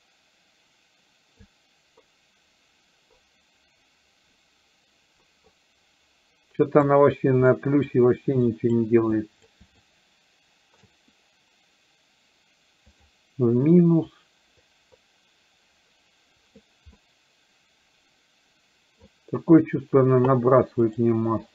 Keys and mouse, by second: 1.5-7.0 drag, 7.5 middle click, 8.5 click, 9.2 click, 10.0 shift+click, 14.1-16.6 drag, 17.1-19.0 middle drag, 21.0 click, 21.4-21.5 drag.